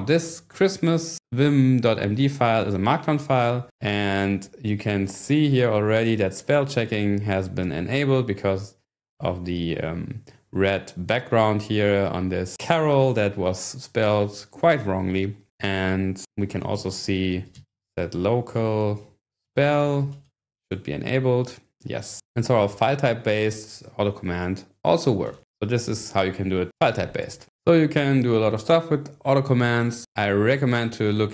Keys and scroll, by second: 16.5-20.7 typing, 22.6 ctrl+6, 25.1-25.9 typing.